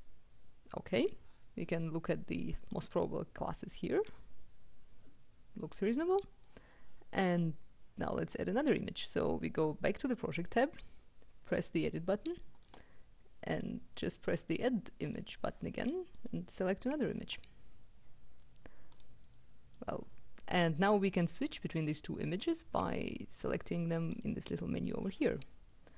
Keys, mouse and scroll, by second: 2.5 click, 7.7-9.0 drag, 11.2 click, 13.6 click, 15.1 click, 16.1 click, 19.0 click, 21.3 click, 23.9 click.